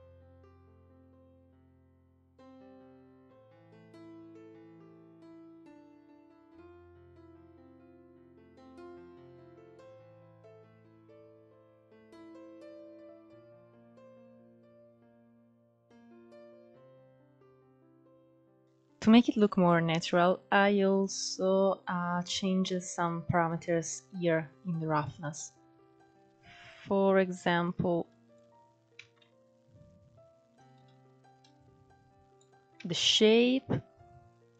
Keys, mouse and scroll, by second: 0.0 click, 0.2-1.1 middle drag, 1.1 scroll down 3, 1.3 middle click, 1.7-2.5 scroll up 6, 1.8 shift+middle click, 2.1 middle click, 2.6 ctrl+s, 2.7 scroll down 2, 3.2 click, 3.6 scroll up 2, 3.8 middle drag, 4.0-6.0 drag, 6.0 scroll down 2, 6.2 click, 6.3-7.2 middle drag, 7.2 scroll up 1, 7.2-8.3 middle drag, 8.8 scroll up 3, 9.0 middle click, 9.5 click, 9.9 click, 10.6-11.0 middle drag, 11.0-11.6 drag, 11.6 middle click, 12.1-14.4 drag, 14.4 scroll down 3, 14.6 click, 14.7-15.7 middle drag, 16.5 scroll down 4, 16.6 middle click, 16.7 scroll up 4, 17.0 click, 17.2 h, 17.7-18.2 middle drag, 18.2 scroll up 1, 18.3 shift+middle click, 18.6 click, 24.7-28.5 drag, 28.5 ctrl+z, 30.3-32.2 drag, 32.2 ctrl+z, 33.9-34.5 drag.